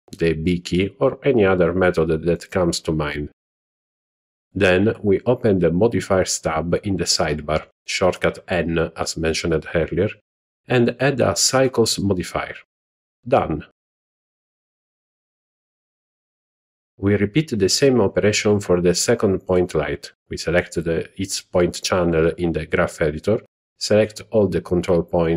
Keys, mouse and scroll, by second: 2.7 ctrl+middle click, 5.9 click, 8.6 click, 8.6 n, 10.2-11.3 drag, 19.0 click, 20.0 click, 22.6 click, 23.1 click.